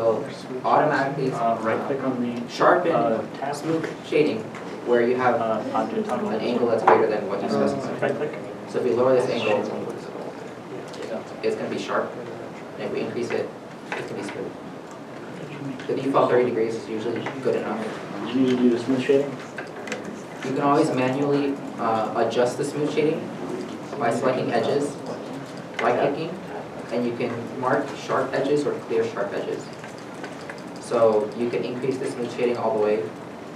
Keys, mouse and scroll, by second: 16.2 scroll, 16.2 3, 16.4 Return, 17.2 shift+middle click, 17.8 middle click, 18.2 scroll up 1, 20.1 Tab, 21.6 2, 24.0 2, 24.3 alt+click, 25.9 right click, 31.1 right click, 31.1 Tab.